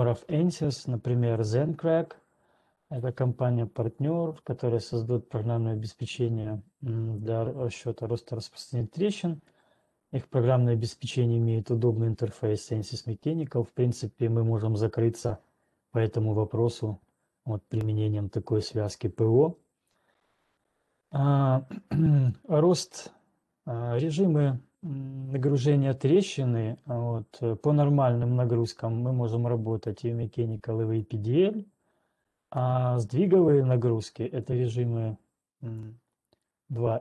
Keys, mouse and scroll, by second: 16.3 click, 29.9 click, 31.4 click.